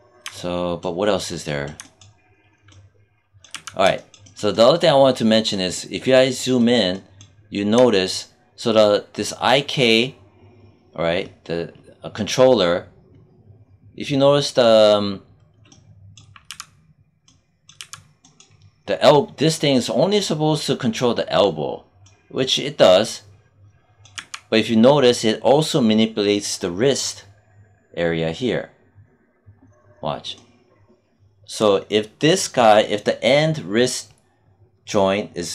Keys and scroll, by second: 3.4 z, 16.4 z, 17.7 z, 24.1 z.